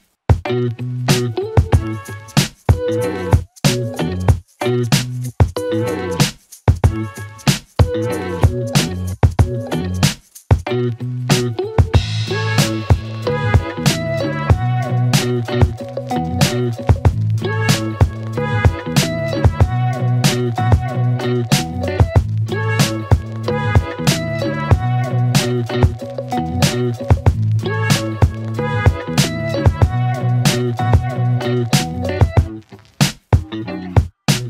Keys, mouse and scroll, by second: 1.2 click, 2.5 Return, 4.7 click, 7.4 click, 8.2 s, 9.7 click, 12.0 Return, 14.5 click, 17.8 ctrl+d, 20.5 click, 29.2 Return, 33.9 click.